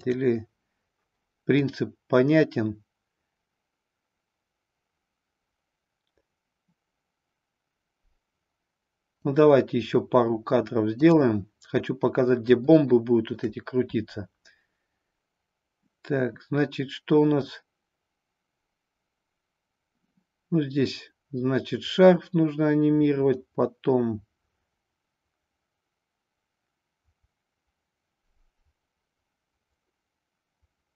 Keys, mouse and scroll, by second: 0.0 click, 1.6-9.2 drag, 11.0 click, 12.7 shift+middle click, 17.5-30.9 drag.